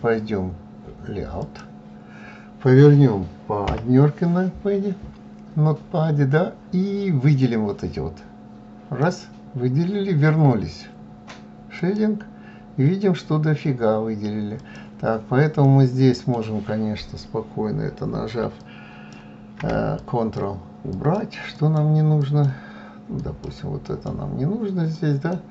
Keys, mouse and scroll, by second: 0.0 click, 2.2 KP_1, 7.6 click, 13.1 click, 14.1-17.8 middle drag, 17.8 shift+click, 19.0 ctrl+click, 19.8 ctrl+click, 20.4 ctrl+click, 21.1 ctrl+click, 22.1 ctrl+click, 22.7 ctrl+click, 24.0 ctrl+click.